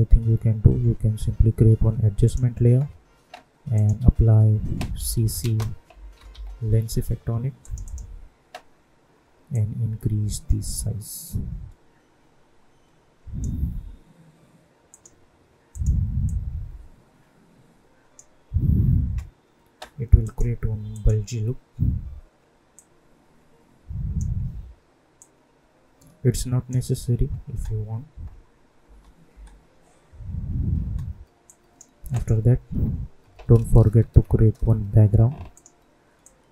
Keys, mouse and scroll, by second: 2.2 click, 3.9 ctrl+a, 4.9-6.7 typing, 7.6-27.4 drag, 27.4 space, 31.4 click, 32.6 u, 34.0 ctrl+y, 35.5 click.